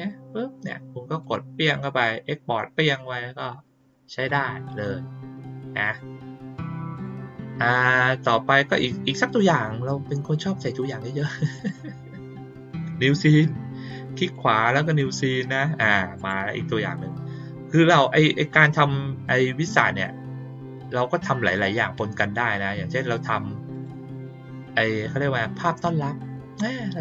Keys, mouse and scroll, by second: 1.2 click, 4.1 click, 4.6 click, 5.7 click, 6.9 click, 11.5 right click, 14.2 right click, 14.9 click, 16.1 click, 23.7 click.